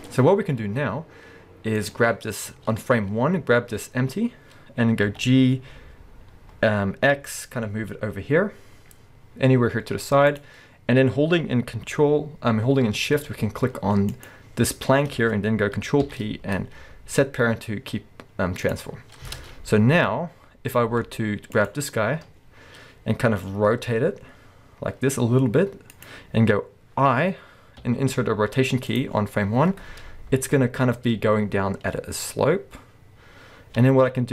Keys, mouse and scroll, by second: 0.0-1.8 middle drag, 1.8 click, 2.3-2.8 scroll down 1, 3.3-5.1 scroll up 1, 5.1 g, 10.4 click, 14.1 shift+click, 16.0 ctrl+p, 19.4 alt+a, 21.6 click, 23.5 r, 26.1 click, 27.8 i, 30.8 space, 33.8 space.